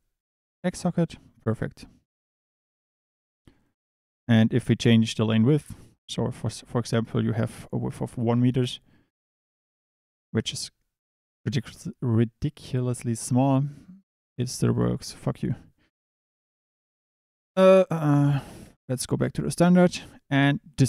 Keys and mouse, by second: 3.2 click, 5.8-8.6 drag, 10.0 click, 16.3-18.6 drag, 19.6 drag.